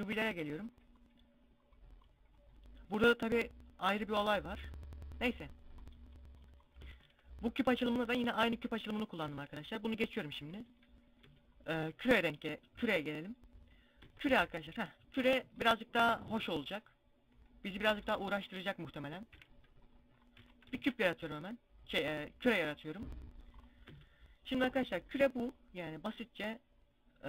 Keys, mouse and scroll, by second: 1.7-6.4 drag, 6.4 Tab, 8.2 z, 8.7 Tab, 10.0 z, 10.7 Tab, 11.6 KP_Decimal, 13.6 Tab, 14.7-16.9 drag, 17.6 scroll down 1, 18.8 scroll down 2, 18.8 KP_Decimal, 19.4-20.0 scroll down 4, 19.8 x, 20.2 shift+a, 22.4 middle click, 23.0 scroll up 2, 23.4 Tab, 23.7 scroll up 1, 25.3 middle click.